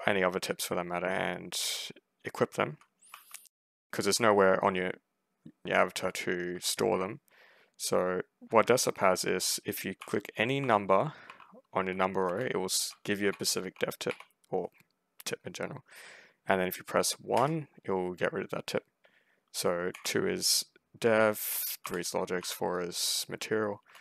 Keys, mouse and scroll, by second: 2.4 s, 3.0 w, 9.8-14.4 typing, 17.2 1, 19.8 2, 21.7 3, 22.3 4, 23.4-24.0 typing.